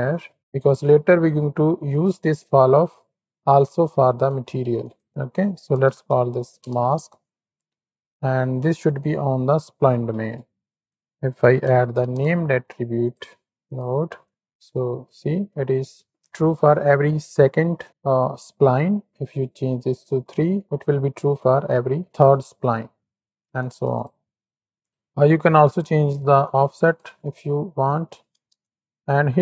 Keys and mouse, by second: 0.8-2.0 drag, 3.8 click, 4.9-6.6 drag, 8.6 click, 10.1 shift+a, 13.6 click, 14.5 click, 15.3 shift+middle click, 16.1 middle drag, 19.8 click, 20.6 middle click, 23.6 click, 24.0 click, 26.4 click, 26.8 click, 27.3-28.5 drag.